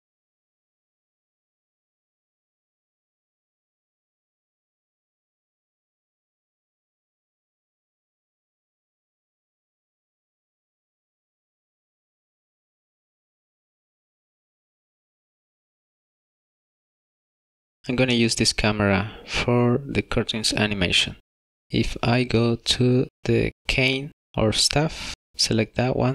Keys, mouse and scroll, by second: 0.9 click, 4.3 click, 8.0 click, 15.9 shift+middle click, 16.8 scroll down 1, 17.4 shift+middle click, 18.0 middle click, 19.0 middle click, 23.2 click.